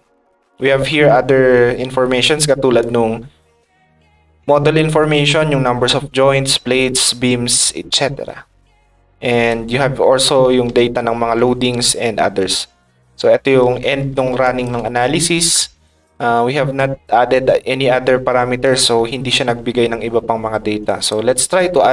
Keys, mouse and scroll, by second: 2.8 ctrl+click, 3.7 ctrl+click, 4.5 ctrl+click, 14.4 ctrl+shift+click, 21.0 click.